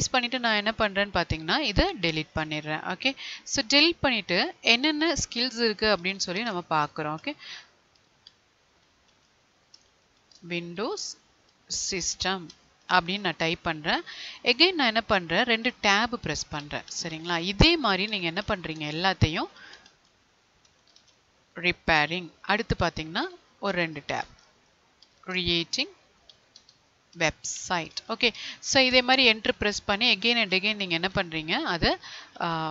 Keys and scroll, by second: 3.6 Delete, 10.3 space, 14.8 Tab, 18.7 space, 22.2 Tab, 25.3 space.